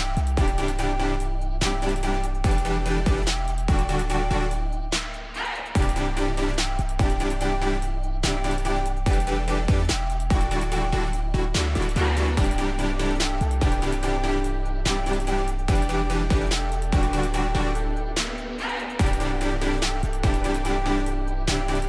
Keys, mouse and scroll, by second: 0.0-0.4 typing, 1.4 Tab, 2.0 Tab, 2.2 Tab, 3.2 Tab, 3.9-4.7 typing, 5.1 Tab, 5.9-8.0 typing, 9.5 Return, 11.9 click, 12.7 alt+click, 13.1-14.9 typing, 16.6-21.6 typing, 17.4 click, 19.0 scroll.